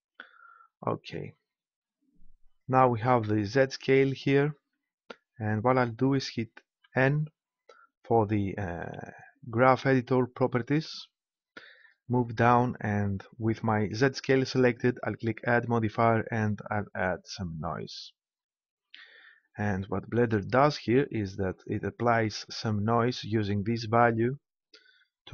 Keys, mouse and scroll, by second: 2.4-4.3 drag, 6.8 n, 15.4-17.3 drag.